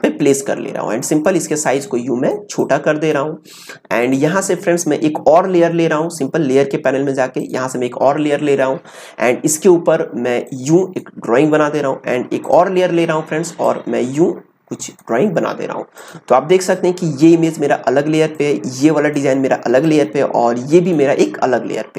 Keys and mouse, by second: 1.0-6.1 drag, 7.4-21.9 drag.